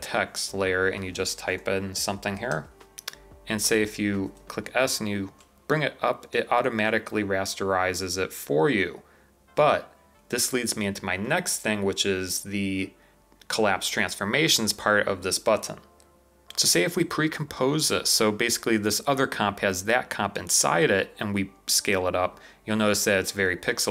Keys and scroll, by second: 1.2-2.4 typing, 4.3 s, 6.8 v, 16.1 typing.